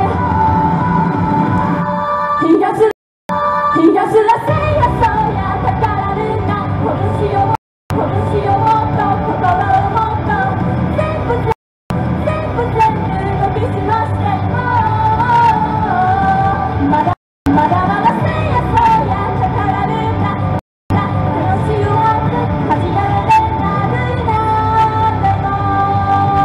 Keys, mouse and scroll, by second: 2.9 right click, 3.1 Return, 3.3 space, 7.6 right click, 7.8 Return, 8.0 space, 11.5 right click, 11.7 Return, 11.9 space, 17.1 right click, 17.3 Return, 17.5 space, 20.6 right click, 20.7 Return, 20.9 space.